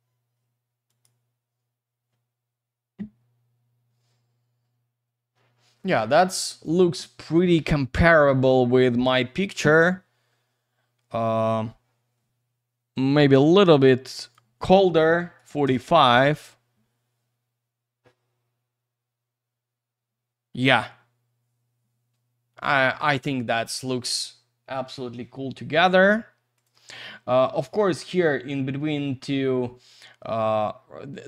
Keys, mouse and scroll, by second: 0.9 click, 3.1-3.8 scroll up 1, 3.8-5.8 scroll down 1, 13.4 click, 14.1 click, 15.4 typing, 15.6 Return, 19.8-21.3 scroll up 1, 21.7-23.6 scroll down 1, 26.6 click.